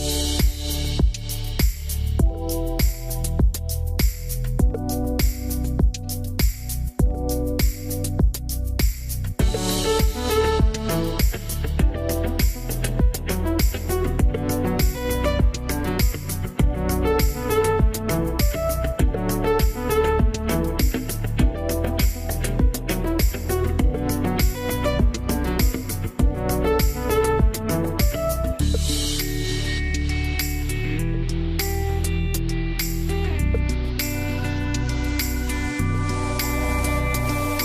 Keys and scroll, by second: 3.0 2, 3.3 Return, 6.8 BackSpace, 7.4 9, 7.6 Return, 15.0 8, 15.2 Return.